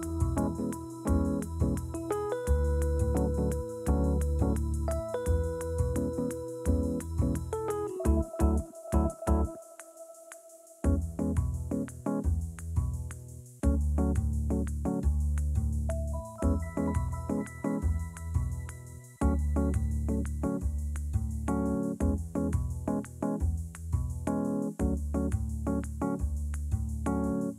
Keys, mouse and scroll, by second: 2.8 Tab, 3.8-6.8 shift+drag, 8.3 click, 9.0-12.8 drag, 13.9 Tab, 14.5 a, 15.0 Tab, 16.2 Tab, 17.0-17.9 scroll up 1, 17.9 3, 18.1 click, 18.6 shift+click, 19.0 shift+click, 19.3 shift+click, 20.3 click, 22.5 a, 23.4-25.0 drag, 25.0 Tab, 25.4 Tab, 26.1 s.